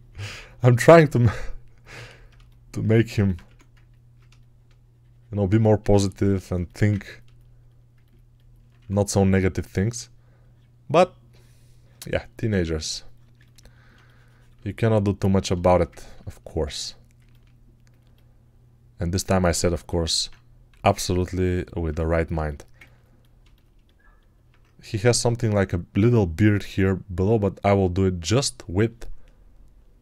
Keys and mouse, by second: 3.3 1, 8.6 1, 20.6 x, 22.3-30.0 alt+right drag.